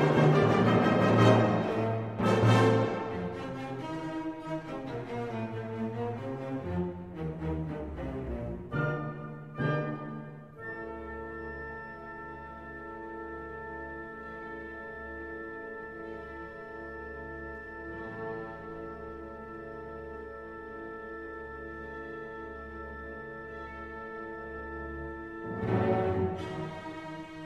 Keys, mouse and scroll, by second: 1.5 click, 6.4 click, 8.0 click, 8.8 0, 9.3-9.9 scroll down 1, 10.5 click, 11.3 click, 12.4 4, 13.5 0, 14.7 click, 15.6 6, 16.2 0, 18.0 click, 18.6-20.3 typing, 20.8-21.2 scroll down 2, 21.6 click, 23.6 click, 25.1 click, 26.9 click.